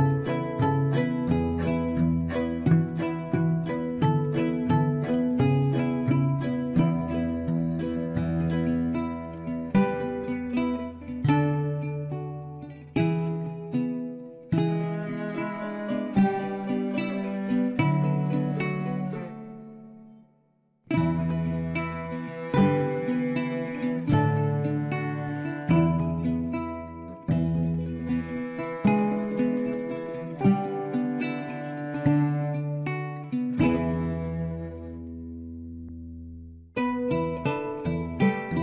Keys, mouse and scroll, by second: 0.6-1.0 scroll up 2, 1.0-3.2 middle drag, 3.2 click, 4.5 click, 6.1 KP_3, 7.3-7.8 scroll up 1, 8.4 shift+click, 9.7 f, 10.1 click, 10.8-12.9 shift+middle drag, 12.9 click, 14.2 shift+click, 15.2 f, 16.5 click, 17.6 shift+click, 18.7 f, 19.8 click, 21.0 shift+click, 22.1 f, 22.8 click, 24.4 shift+click, 26.2 f, 27.0 click, 27.6 scroll down 4, 28.4-31.4 middle drag, 31.6 shift+middle click, 32.2-32.7 scroll up 2, 32.7-34.3 middle drag, 34.3 Tab, 35.0 Tab, 36.1 click, 36.4 shift+middle click, 36.9 click, 37.4 shift+click, 38.3 f, 38.5 click.